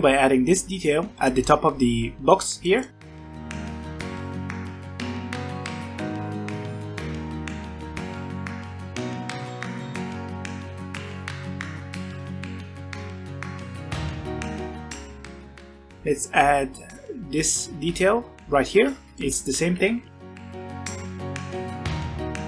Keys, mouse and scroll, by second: 2.9 ctrl+r, 3.5 s, 5.0 middle click, 6.4 middle click, 6.5 ctrl+r, 7.5 ctrl+r, 8.3 3, 8.5 1, 9.0 3, 9.2 click, 9.3 middle click, 9.6 ctrl+click, 9.7 shift+middle click, 9.8 scroll up 1, 10.0 middle click, 10.3 ctrl+click, 10.5 shift+middle click, 10.8 alt+e, 11.3 scroll down 1, 11.4 Tab, 11.5 Tab, 11.6 scroll up 1, 11.6 middle click, 12.5 ctrl+r, 12.8 middle click, 12.9 ctrl+r, 13.0 3, 13.1 shift+middle click, 13.2 scroll up 1, 13.3 middle click, 13.7 middle click, 13.9 ctrl+click, 14.2 shift+middle click, 14.4 alt+e, 14.6 middle click, 15.2 Tab, 15.4-16.0 shift+middle drag, 16.0-16.5 scroll down 3, 18.8 Tab, 19.0 alt+a, 19.1 middle click, 20.0 ctrl+r, 20.6 shift+middle click, 20.8 g, 21.2 1, 21.4 alt+a, 21.7 alt+click, 21.8 g.